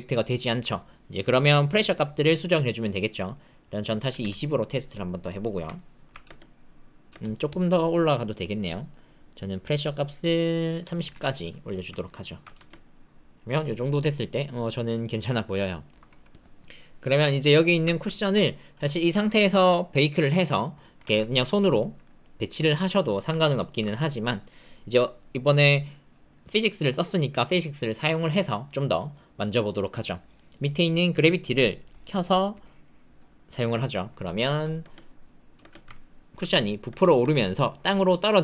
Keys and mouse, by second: 2.0-4.2 drag, 5.7 alt+click, 6.2 space, 7.0 space, 8.2 click, 8.7 click, 9.3 click, 10.0-11.1 drag, 12.0 alt+click, 12.5 space, 13.4 space, 13.8-15.5 drag, 15.7 shift+click, 17.8 ctrl+click, 18.1 shift+click, 21.0 g, 23.3 alt+click, 29.8 click, 30.4 middle click, 30.9 middle click, 31.9 click, 32.6 click, 34.8 space, 35.5 space, 35.9 alt+middle click, 36.8 space, 37.1 space.